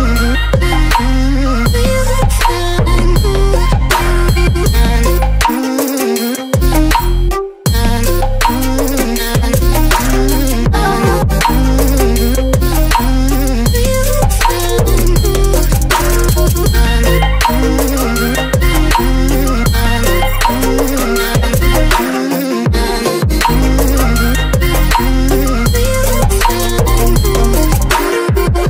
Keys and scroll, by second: 0.0 Return, 0.4 space, 5.4 space, 9.2 Caps_Lock, 10.6-11.9 typing, 16.0 Return.